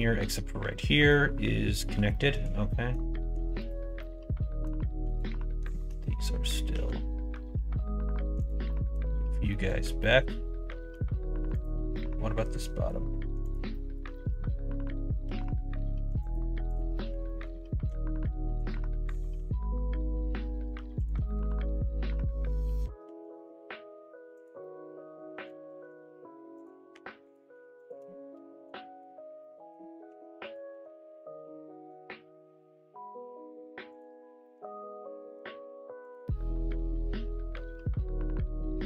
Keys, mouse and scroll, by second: 1.0 middle click, 2.0 shift+middle click, 2.6 middle click, 3.5 click, 3.9 middle click, 5.0 click, 5.6 middle click, 6.7 g, 8.7 middle click, 9.5 middle click, 10.0 middle click, 11.5 click, 11.9 middle click, 13.4 click, 13.6 middle click, 14.1 middle click, 15.2 g, 16.6 click, 16.9 middle click, 17.2 middle click, 17.8 g, 19.1 click, 19.3 g, 21.4 1, 21.7 middle click, 23.0 g, 24.5 click, 24.6 middle click, 25.7 g, 26.9 2, 27.2 click, 27.8 shift+click, 28.3 f, 28.7 middle click, 29.3 middle click, 30.0 1, 30.4 click, 30.6 g, 34.4-35.4 middle drag, 36.6 click, 36.8 middle click, 38.5 g.